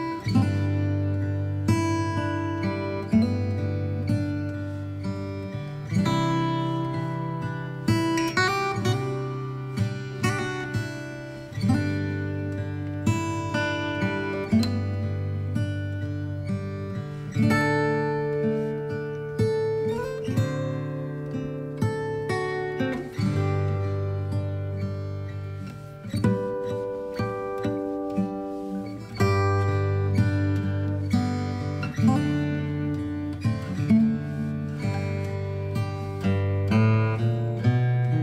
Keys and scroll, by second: 7.2 ctrl+j, 28.1 ctrl+j.